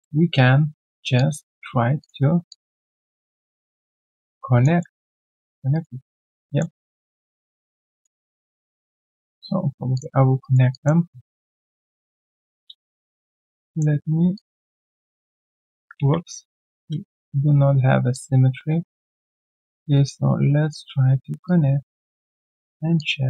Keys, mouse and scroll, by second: 0.0 alt+double click, 0.9 alt+right click, 1.1 alt+click, 2.5 alt+click, 3.7 alt+middle click, 4.0-4.3 alt+scroll down 1, 4.3 alt+click, 4.8 alt+middle click, 5.0 alt+right click, 5.4 alt+click, 5.7 alt+right click, 6.0 alt+click, 6.4 alt+middle click, 6.8 alt+click, 7.3 alt+middle click, 7.6 alt+click, 8.2 alt+middle click, 8.8 alt+click, 9.1 alt+right click, 10.4 alt+right click, 11.9 alt+click, 12.3 ctrl+shift+q, 16.1 ctrl+z.